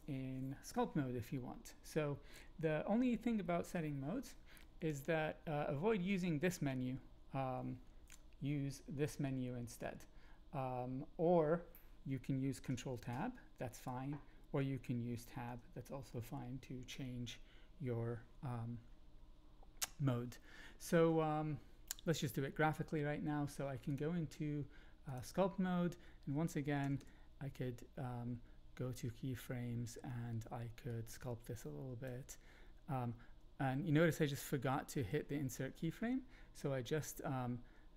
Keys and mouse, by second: 12.9 ctrl+Tab, 15.1 Tab, 15.4 Tab, 24.0-25.2 drag, 26.8 Right, 26.9 Right, 30.9-32.0 drag.